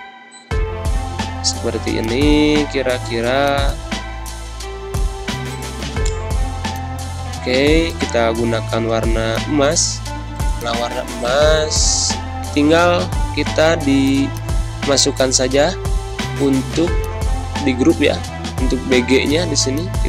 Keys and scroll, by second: 0.1 g, 7.4 i, 8.8 g, 11.5 ctrl+0, 12.4 0, 12.9 ctrl+0, 17.5 ctrl+z, 18.1 ctrl+g.